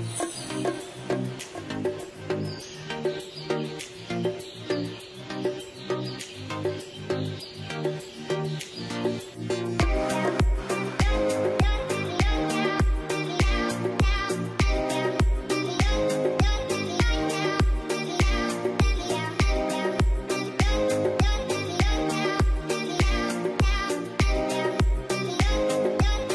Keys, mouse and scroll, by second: 6.6-8.6 scroll up 1, 11.4 double click, 14.9-17.2 scroll up 1, 17.2 double click, 20.0 double click, 21.8 double click.